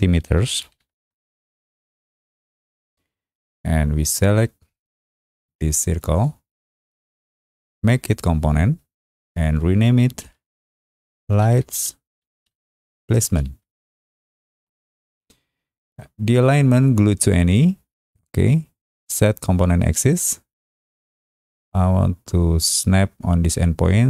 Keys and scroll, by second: 0.0-1.2 typing, 1.4 Return, 6.0 Return, 10.9-15.0 typing.